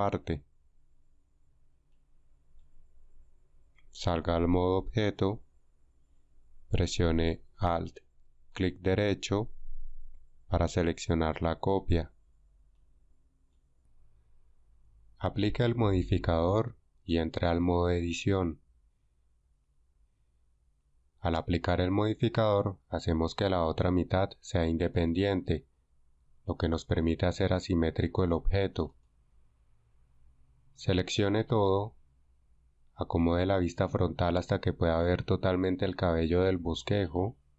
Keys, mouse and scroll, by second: 31.7 a.